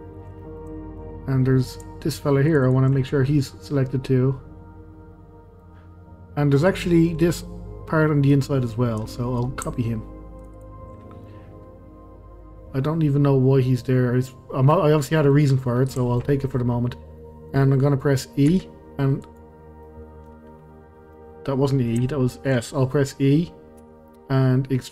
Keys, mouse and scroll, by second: 0.4-1.1 middle drag, 1.1 scroll up 1, 2.5 shift+click, 2.6 shift+click, 3.0-6.0 middle drag, 7.1-8.6 middle drag, 8.6-9.1 scroll up 1, 9.1-10.4 middle drag, 10.4 shift+click, 10.5 shift+click, 11.0 scroll down 1, 11.2-14.7 middle drag, 15.8 scroll down 2, 16.1 shift+middle click, 16.7-17.2 scroll up 2, 17.2-18.5 middle drag, 18.5 s, 19.8-23.8 middle drag, 23.8 e.